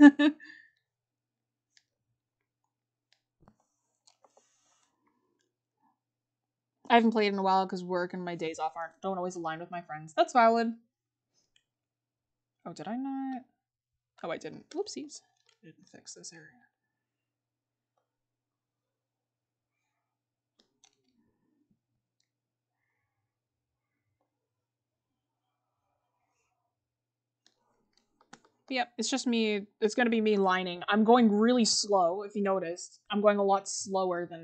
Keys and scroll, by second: 14.5 scroll, 15.1 scroll, 28.2-28.7 scroll, 28.7 scroll.